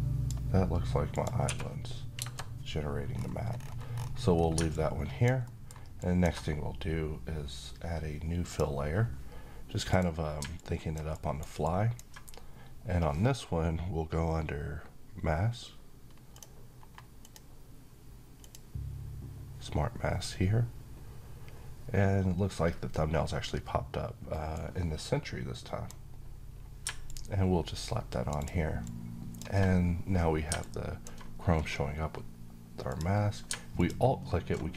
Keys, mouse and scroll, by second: 1.1 1, 2.9-3.3 scroll down 1, 3.3-3.6 scroll up 1, 4.4-5.0 click, 5.1 alt+middle click, 5.7 alt+click, 10.8 alt+right click, 11.4-12.0 alt+drag, 24.2-25.8 drag.